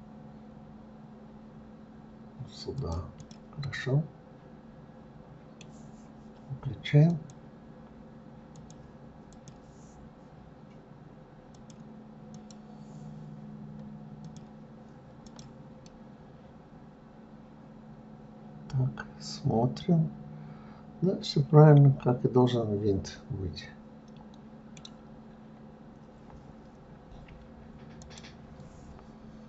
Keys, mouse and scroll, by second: 3.5 click, 3.9-6.9 middle drag, 7.3 click, 8.8 click, 9.6 click, 11.8-14.8 drag, 15.5 click, 16.1-19.1 middle drag, 25.4-26.5 scroll up 1, 26.5-28.4 scroll up 1.